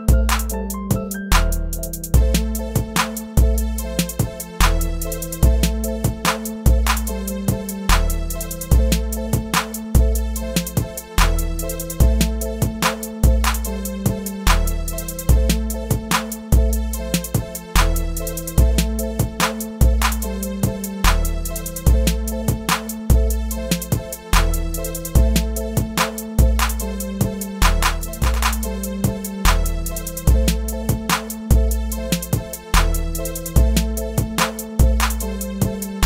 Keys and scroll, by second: 1.8 shift+Return, 2.9 shift+Return, 31.1 shift+Return.